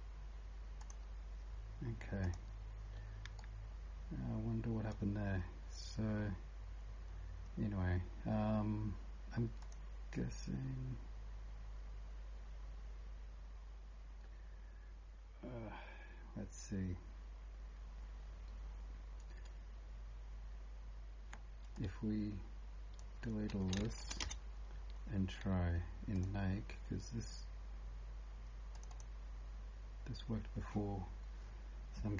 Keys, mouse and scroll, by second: 3.4 right click, 9.6 click, 23.8 shift+Delete, 24.2 Return, 28.8 click.